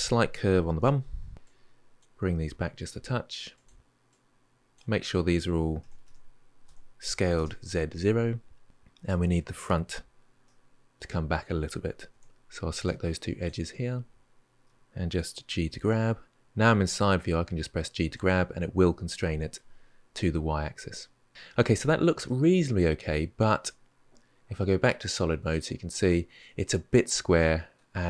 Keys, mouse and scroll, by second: 0.6 KP_3, 1.3 click, 2.1 g, 3.9 click, 5.6 s, 10.2-11.9 middle drag, 11.9 2, 12.6 click, 13.2 shift+click, 14.4 KP_3, 15.5 g, 22.0-25.0 middle drag, 25.2 click, 25.9-27.5 shift+middle drag, 27.5-28.0 scroll up 1.